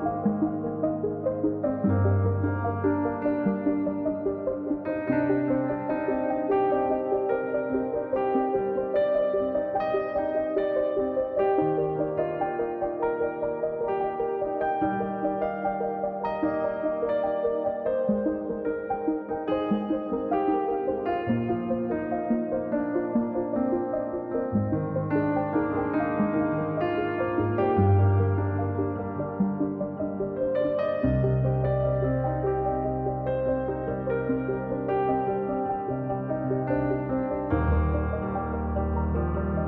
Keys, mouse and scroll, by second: 0.4-1.6 drag, 1.6 middle click, 1.8 scroll down 2, 2.0 middle click, 2.2-2.8 scroll up 1, 2.8 click, 3.2 scroll up 2, 3.4 middle click, 3.9-5.0 drag, 5.4 middle click, 5.8 click, 6.3 middle click, 6.5-7.5 drag, 7.5 middle click, 7.8-9.0 drag, 10.2-10.6 scroll up 2, 10.6 click, 10.9 middle click, 11.2 click, 12.0 middle click, 12.5-13.5 drag, 13.5 middle click, 13.7-14.1 scroll down 1, 14.1 click, 14.4 middle click, 14.7 click, 15.6 middle click, 16.1-17.3 drag, 17.6 middle click, 17.9 click, 18.3 middle click, 18.6 click, 18.8-19.3 scroll down 2, 19.3 click, 19.6 scroll up 1, 19.8-20.9 drag, 21.8 scroll up 1, 22.0 middle click, 22.2-23.4 drag, 24.4 middle click, 24.6-25.8 drag, 25.9 scroll down 2, 26.1 scroll up 2, 26.3 click, 26.6 middle click, 26.9-28.1 drag, 28.6 scroll down 2, 28.7 middle click, 29.0 scroll up 1, 29.2 middle click, 29.5 KP_1, 29.8-30.4 scroll up 1, 30.4-32.0 drag, 33.4-33.9 scroll down 6, 33.9 click, 34.4-35.0 scroll up 3, 35.0 scroll down 3, 35.2-36.3 drag, 38.2-39.3 drag.